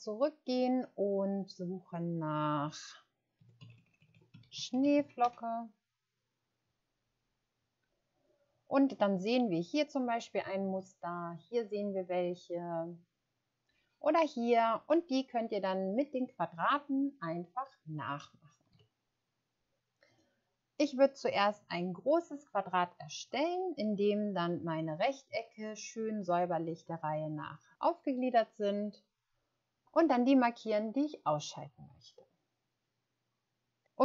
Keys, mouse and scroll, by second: 3.4-4.8 typing, 5.2 Return, 12.2 scroll down 1, 13.4 scroll down 1, 18.7 alt+Tab.